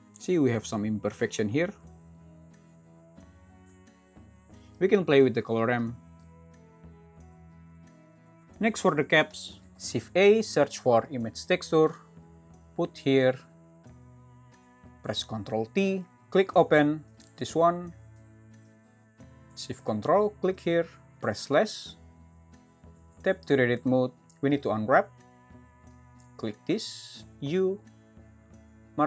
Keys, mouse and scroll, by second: 9.8 shift+a, 16.0 ctrl+t, 23.5 Tab.